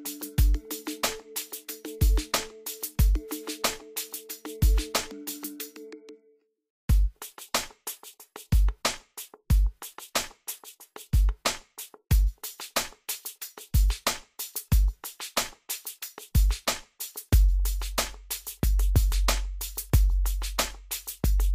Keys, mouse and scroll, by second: 1.6 scroll up 1, 2.2-2.6 scroll down 1, 2.8 scroll up 1, 3.1-3.6 scroll down 1, 4.3 scroll up 1, 4.9-5.2 scroll down 1, 7.6-12.2 drag, 12.2 scroll up 1, 12.6 scroll down 1, 13.4 scroll up 1, 13.7 scroll down 1, 14.0-14.4 scroll up 1, 14.4-15.0 scroll down 1, 16.6-21.5 drag.